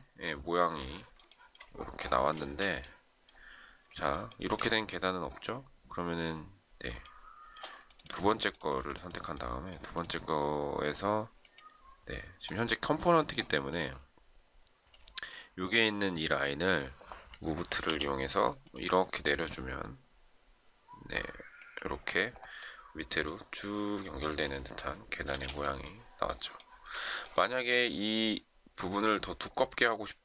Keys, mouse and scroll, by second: 1.2 shift+middle click, 2.4 shift+middle click, 4.4 space, 7.0 shift+middle click, 17.8 m, 25.2 space, 26.5 shift+middle click, 27.4 shift+middle click.